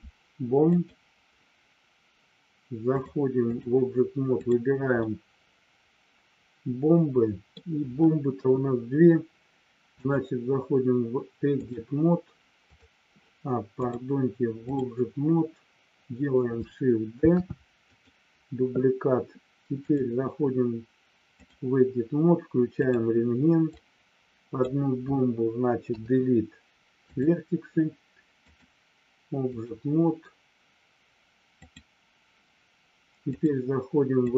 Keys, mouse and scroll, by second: 3.1 click, 4.5 click, 5.0-7.5 middle drag, 8.3 KP_1, 9.9-11.9 drag, 12.7 click, 13.9-14.9 drag, 17.9 click, 19.9-21.6 drag, 23.6-24.6 drag, 25.9 Delete, 28.5-29.7 drag, 31.5 click, 33.2-34.3 drag.